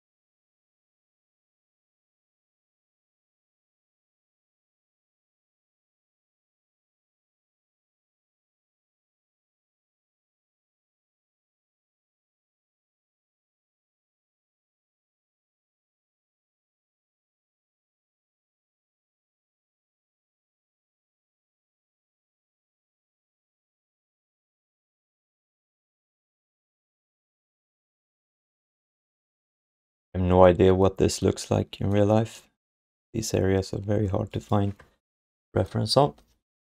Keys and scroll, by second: 11.4 q, 12.4 ctrl+s.